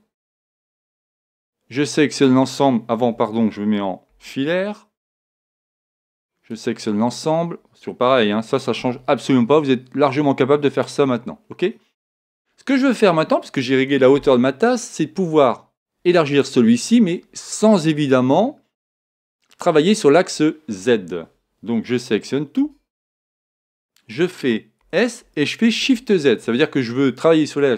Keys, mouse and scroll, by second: 0.3 a, 0.9 b, 3.0 Escape, 4.1 z, 5.4 a, 5.9 b, 8.1 g, 10.9-12.7 drag, 11.4-13.5 middle drag, 22.6 a, 22.9 a, 24.8 s.